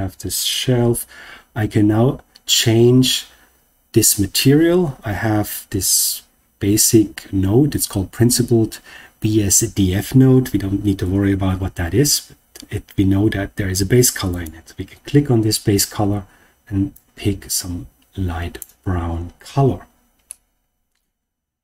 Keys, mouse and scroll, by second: 14.2 click, 20.2 scroll up 1, 20.2-21.6 middle drag.